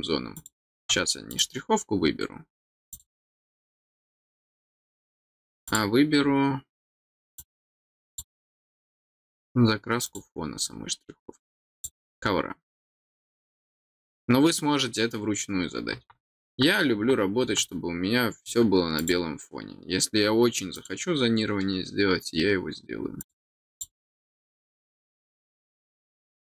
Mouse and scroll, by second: 0.3 click, 1.3 click, 2.9 click, 5.6 click, 7.3 click, 8.0 click, 10.0 click, 11.7 click, 18.9 click, 20.7 click, 23.2 click, 23.7 click, 26.1 click.